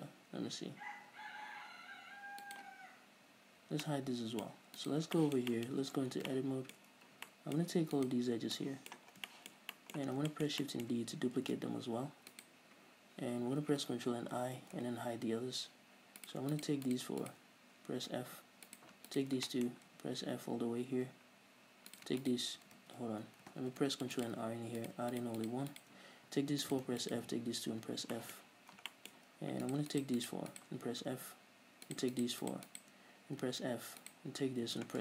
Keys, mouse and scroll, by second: 2.6 h, 2.9 right click, 4.1 h, 4.2 middle click, 4.8-5.2 middle drag, 5.2 right click, 5.5-8.3 shift+middle drag, 6.1 scroll up 2, 6.4 Tab, 7.3 scroll up 1, 8.3 alt+right click, 8.8 scroll down 2, 8.9 middle click, 9.5 scroll down 2, 9.6 shift+middle click, 10.5 scroll down 2, 10.7-12.8 shift+middle drag, 11.8 shift+d, 12.8 right click, 14.8 ctrl+i, 15.2 h, 16.6 right click, 16.9 shift+right click, 17.2 shift+right click, 17.6 shift+right click, 18.7 f, 19.1 right click, 19.5 shift+right click, 19.9-22.3 shift+middle drag, 20.3 f, 22.3 e, 22.3 right click, 22.6 shift+right click, 23.2 ctrl+z, 24.5 ctrl+r, 24.6 click, 25.2 right click, 25.5 shift+right click, 25.8 shift+right click, 26.1 shift+right click, 26.8 f, 27.0 right click, 27.4 shift+right click, 28.2 f, 28.5-30.0 shift+middle drag, 28.9-29.3 scroll up 2, 30.0 right click, 30.3 shift+right click, 30.6 shift+right click, 30.9 shift+right click, 31.7 f, 32.3 right click, 32.5 shift+right click, 32.8 shift+right click, 33.1 shift+right click, 34.5 right click.